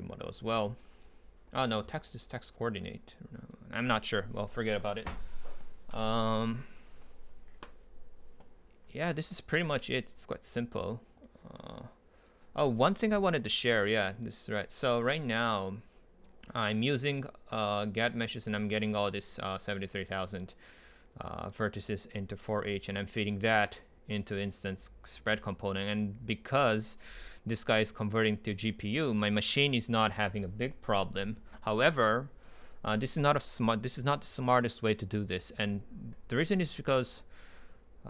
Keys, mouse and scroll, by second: 0.0-0.8 drag, 0.8-3.0 right drag, 18.6-19.4 drag, 20.9-25.6 drag, 34.6 click.